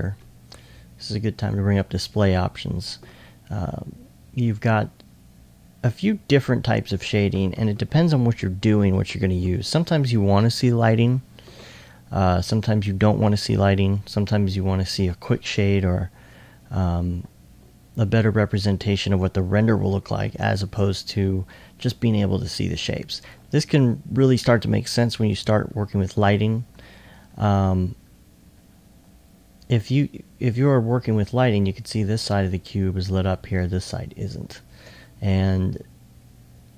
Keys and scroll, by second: 26.8 e, 28.5 e.